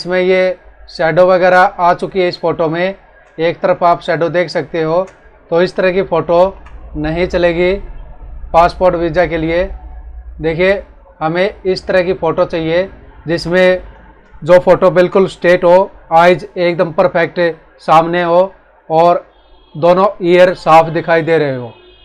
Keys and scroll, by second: 2.2 space, 5.5 ctrl+-, 13.2 ctrl+=, 14.1 space.